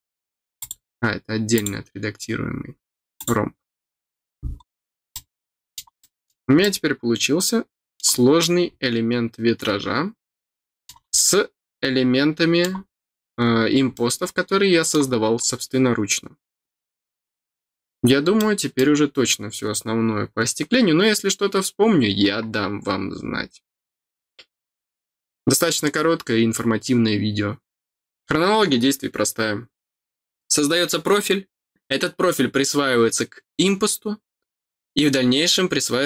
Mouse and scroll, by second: 0.5 click, 1.5 click, 3.1 click, 4.5 middle click, 5.1 middle click, 5.9 middle click, 6.5-7.9 middle drag, 8.3-10.8 middle drag, 11.1-12.6 middle drag, 13.9-18.7 middle drag, 18.8 scroll down 1, 19.4-20.7 scroll down 1.